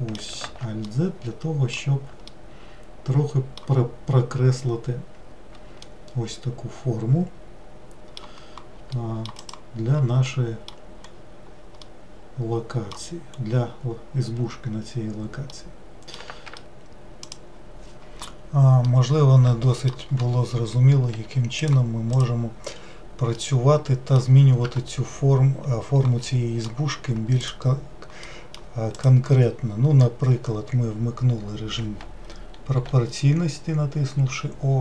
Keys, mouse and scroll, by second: 0.6 alt+z, 1.1-9.6 middle drag, 9.6-10.4 drag, 10.4-11.2 middle drag, 11.2-11.6 scroll up 3, 12.0 scroll up 1, 12.1-13.5 middle drag, 13.5-15.6 scroll up 2, 15.6 scroll up 1, 15.7-17.3 middle drag, 17.3-17.9 scroll down 1, 18.9-21.2 middle drag, 21.2 Tab, 21.7 click, 22.2 click, 23.4-24.7 middle drag, 24.7 Tab, 26.3-27.5 middle drag, 27.5-28.3 drag, 28.3-29.0 middle drag, 29.0-32.8 drag, 32.8 o, 34.3 o.